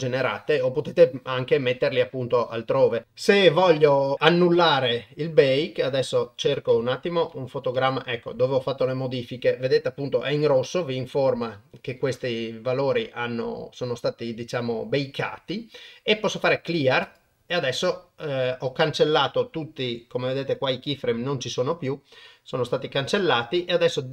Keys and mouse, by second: 5.1-6.5 drag, 7.1 Left, 7.3 Left, 7.8 Right, 10.3 click, 17.1 click, 21.8-24.1 drag.